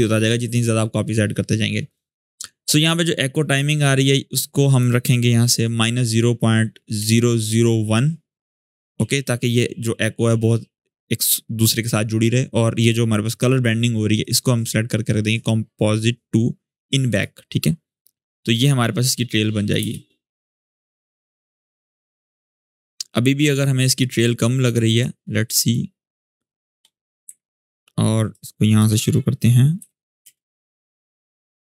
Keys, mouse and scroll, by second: 1.6 click, 4.1 click, 4.1-4.8 drag, 6.7-7.2 typing, 8.2 click, 13.9 click, 16.8 click, 16.9 click, 19.5 space, 23.3-26.7 drag, 27.0 n, 27.9-28.5 drag, 29.5 b, 30.0 space.